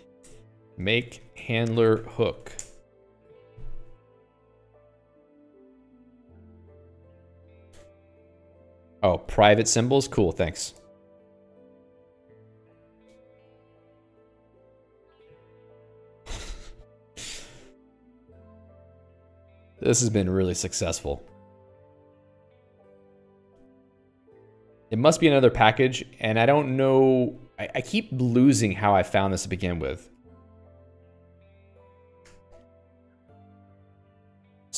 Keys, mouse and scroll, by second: 0.0-2.8 typing, 0.7 Return, 3.0 Return, 17.8 click, 18.4 Escape, 18.6 Escape, 18.9 j, 19.6-21.1 l, 21.4 j, 23.0 Escape, 23.6 x, 23.9 ctrl+s, 24.1 Escape, 24.9 alt+x, 26.0 ctrl+g, 27.0 click, 27.5 Escape, 27.9 click, 28.0 alt+x, 28.9 ctrl+g, 29.3 click, 29.8 ctrl+alt+j, 30.3-31.5 typing, 31.5 ctrl+j, 31.8 ctrl+j, 32.7 ctrl+g.